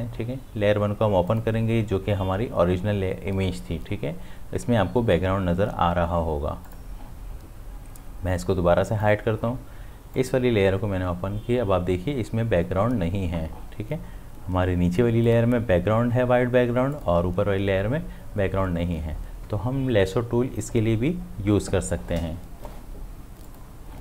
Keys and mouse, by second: 6.6 click, 8.9 click, 15.3 click, 23.5 click.